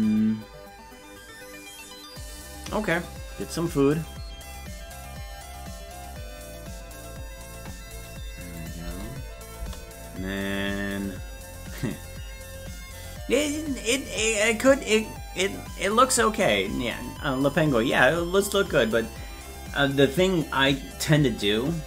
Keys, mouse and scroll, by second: 8.6 click, 8.8 space, 10.4-11.8 drag, 10.4 space.